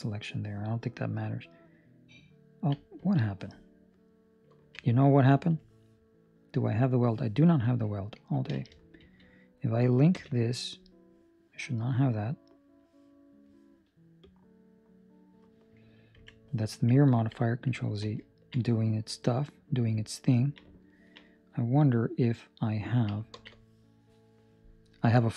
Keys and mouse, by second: 1.2 click, 5.3 Escape, 8.3 alt+Escape, 8.5 alt+a, 8.9 Escape, 10.1 l, 14.2 click, 17.9 ctrl+z, 20.1 ctrl+middle click, 21.0 ctrl+middle click, 21.2 middle click, 23.3 ctrl+space.